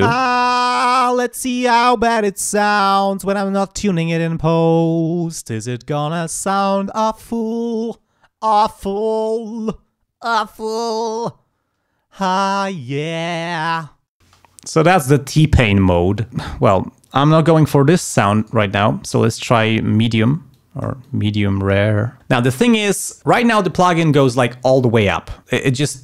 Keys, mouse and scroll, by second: 0.0 space, 14.2 space, 17.0-18.2 drag, 18.3 right click, 20.5 click.